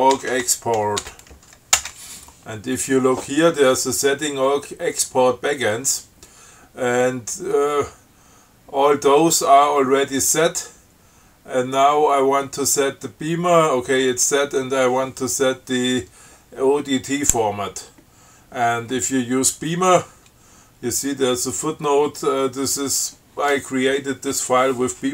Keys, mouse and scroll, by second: 0.0-1.6 typing, 2.0 Return.